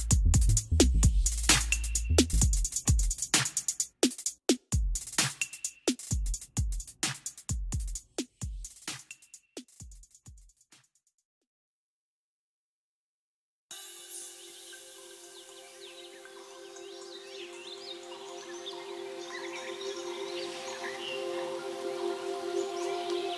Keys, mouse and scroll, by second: 0.4 scroll up 1, 0.6 scroll down 2, 0.8 scroll, 0.8 o, 2.0 click, 5.3 click, 6.8 F3, 8.4 click, 9.7 m, 10.7 click, 13.0 click, 13.9 click, 16.0 click, 17.3 x, 17.9-18.2 scroll up 3, 18.7 click.